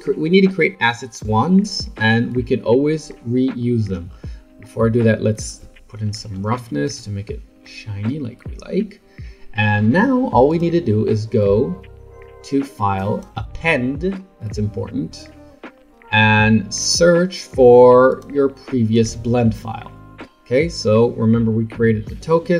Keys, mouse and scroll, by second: 4.1 scroll down 5, 5.4-7.6 drag, 7.6-10.5 middle drag, 10.5-13.5 drag.